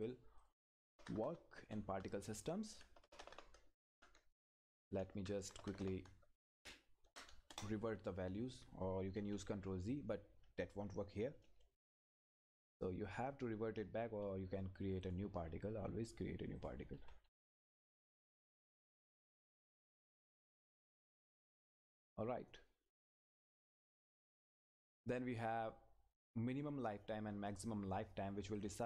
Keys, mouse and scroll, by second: 0.0 click, 4.7 Right, 7.5 Return, 9.2 ctrl+z, 15.0 click, 20.6 click, 28.6 click.